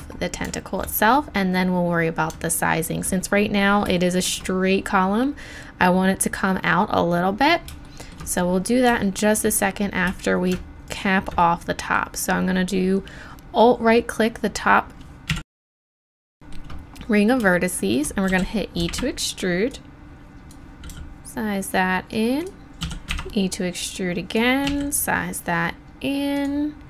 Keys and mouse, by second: 15.3 KP_1, 18.3 e, 19.7-20.9 drag, 20.9 s, 21.5 click, 21.9 middle click, 22.8 e, 24.7 s.